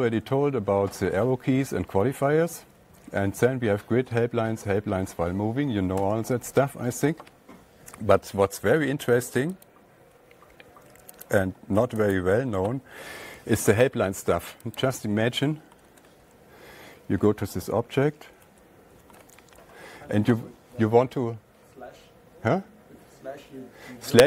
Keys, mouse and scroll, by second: 6.5 alt+Tab, 10.1 click, 11.7 click, 12.6 click, 15.2 click, 16.3 /, 18.9 scroll down 1, 19.0 /, 19.5-19.8 scroll down 1.